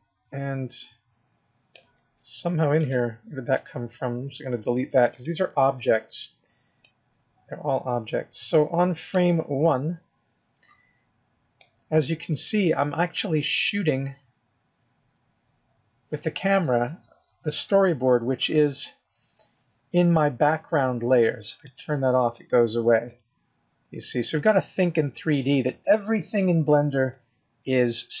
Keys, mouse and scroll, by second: 4.5 x, 6.9 click, 10.0 scroll up 3, 10.6-11.6 scroll down 6, 11.6 middle click, 12.6-13.1 scroll down 4, 13.4 middle click, 19.1-21.0 scroll down 4, 21.7 click, 22.2 click, 23.0 middle click, 24.4 middle click, 25.5-25.9 scroll up 3, 25.9-26.3 scroll down 4, 26.3 middle click, 27.3-28.2 scroll up 6.